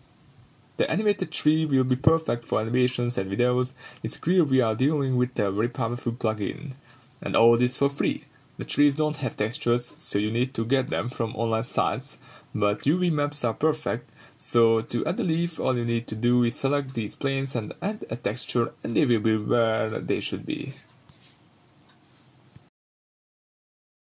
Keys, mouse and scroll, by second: 5.2-21.5 drag, 21.5-22.2 middle drag, 24.0 middle click.